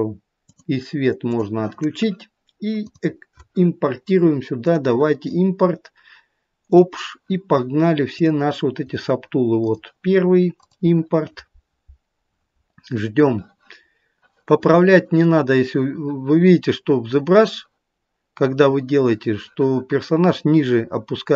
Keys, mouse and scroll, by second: 0.5 click, 1.3 click, 17.0-18.4 scroll up 4, 18.4-20.2 scroll down 1.